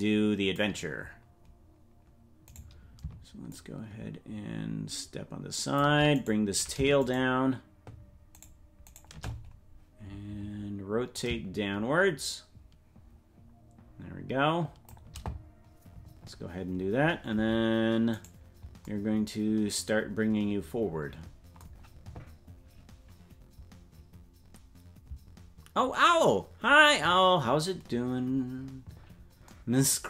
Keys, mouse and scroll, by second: 1.7 scroll down 2, 2.6 right click, 3.5-6.0 shift+drag, 6.3 right click, 7.1-8.5 shift+right drag, 11.1-15.1 drag, 18.3 right click.